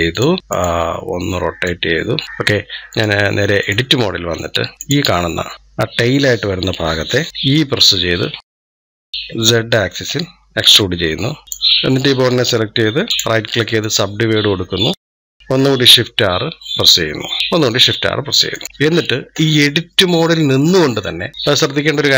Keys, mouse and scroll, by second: 4.1-4.7 scroll up 2, 4.7 click, 5.5 click, 11.4 click, 13.1-15.8 right drag, 15.8 shift+r, 18.4 click, 18.6-18.9 scroll up 3, 21.0 shift+scroll up 1, 21.2-22.1 shift+middle drag.